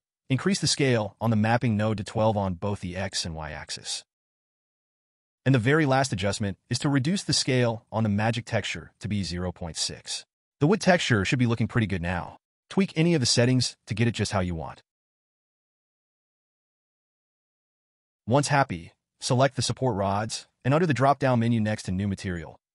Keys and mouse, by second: 1.3 click, 2.9-4.4 drag, 5.6 click, 12.2-15.8 middle drag, 16.7-19.8 drag, 18.8 o, 22.1-22.7 drag.